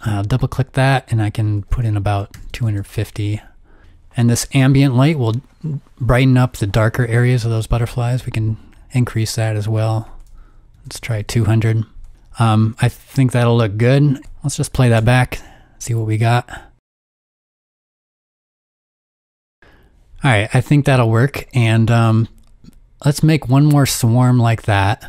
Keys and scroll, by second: 1.8-2.9 typing, 10.7-11.0 typing, 14.2 0, 17.3 space, 17.8 space, 19.3 space.